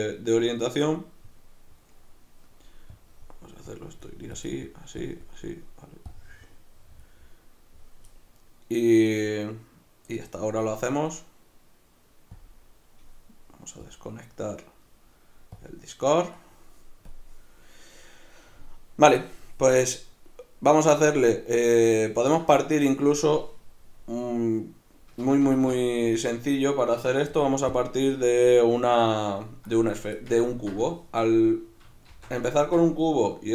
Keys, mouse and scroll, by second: 25.2 Escape, 25.9 right click, 27.7-30.4 drag, 30.4-33.5 ctrl+middle drag, 32.1 shift+c.